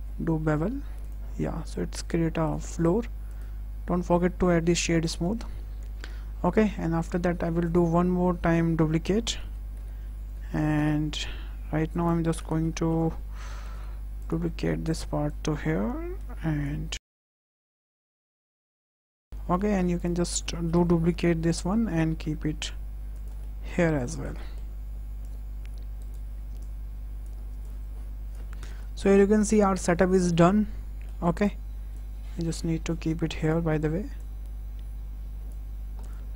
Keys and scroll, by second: 1.2 Tab, 5.1 KP_0, 9.2 shift+d, 9.6 y, 10.6 x, 12.2 KP_0, 16.6 w, 20.9 shift+d, 21.1 y, 22.0 x, 28.5 KP_0.